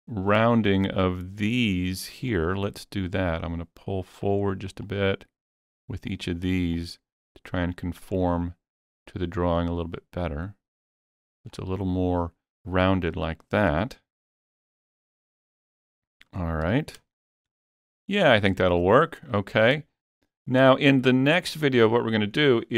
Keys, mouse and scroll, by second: 0.3 scroll up 2, 0.6 shift+middle click, 1.0 scroll up 2, 2.3 click, 3.1-4.9 drag, 4.9-6.8 drag, 6.8-9.0 drag, 9.0-12.5 drag, 13.3-14.0 scroll down 3, 14.5-16.1 middle drag, 15.4-15.9 scroll down 2, 16.7 Tab, 17.6 shift+middle click, 18.2 scroll down 1, 18.2 scroll up 2, 19.3-19.8 middle drag.